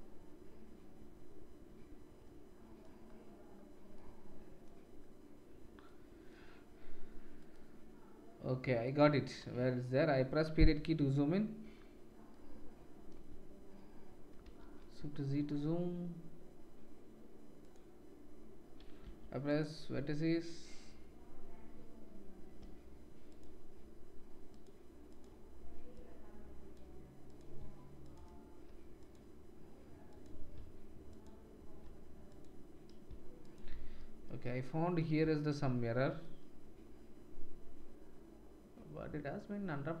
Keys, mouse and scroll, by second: 4.2-7.4 drag, 7.4-9.0 middle drag, 9.0-13.2 drag, 10.8 KP_Decimal, 17.6 middle click, 19.5-24.6 middle drag, 24.6-25.9 drag, 25.9-27.3 middle drag, 27.3-28.0 shift+drag, 28.1-28.9 shift+drag, 29.1-30.1 drag, 30.2-32.2 drag, 32.4-33.4 drag, 33.5-40.0 shift+drag.